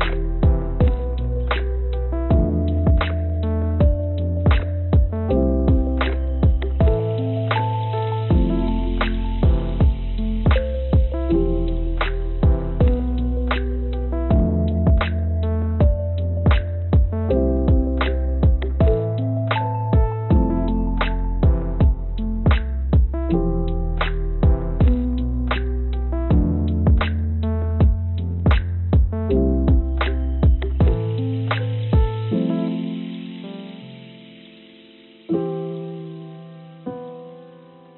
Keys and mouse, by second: 1.5-6.9 drag, 8.9 l, 9.9 shift+d, 16.1 g, 19.4 g, 27.1 g, 29.3 click, 29.4 click, 30.5 g, 35.4 g, 37.2-37.9 drag.